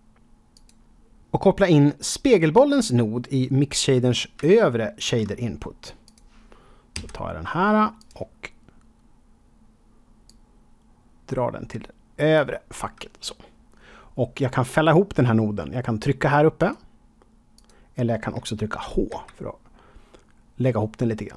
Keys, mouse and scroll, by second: 0.5 click, 4.5 shift+middle click, 5.3 scroll up 1, 6.0 click, 6.9 g, 7.9 click, 10.2 click, 16.5 click, 17.5 click, 19.0 h, 19.9-21.3 scroll down 2.